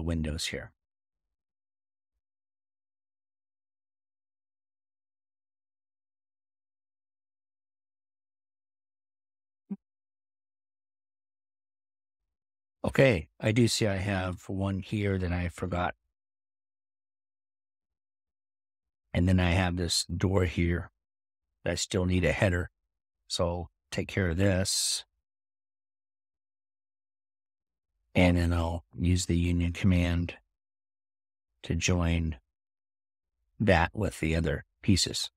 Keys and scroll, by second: 14.7-15.5 typing.